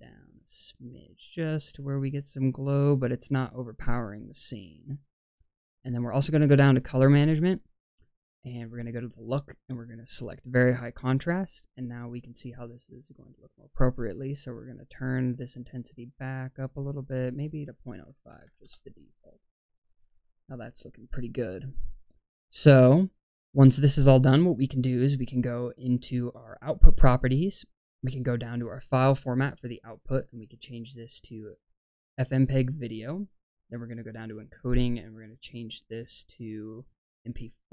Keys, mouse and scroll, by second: 6.7 click, 7.2-8.8 scroll down 4, 8.8-10.4 drag, 8.8-9.9 scroll down 1, 11.6 scroll up 1, 13.6-17.2 drag, 17.3-18.5 drag, 26.4-29.1 drag, 29.5-29.9 scroll down 1, 29.9-33.0 drag, 34.1 click, 34.4-35.1 scroll down 3, 35.1-35.8 scroll down 1, 35.8-37.3 drag, 35.8-37.3 scroll down 1, 37.6-37.7 scroll down 1.